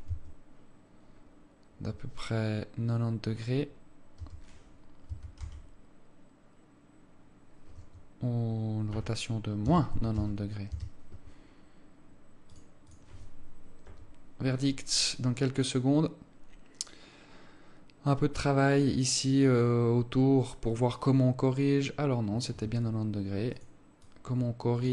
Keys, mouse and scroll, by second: 13.3 click, 23.2 Escape.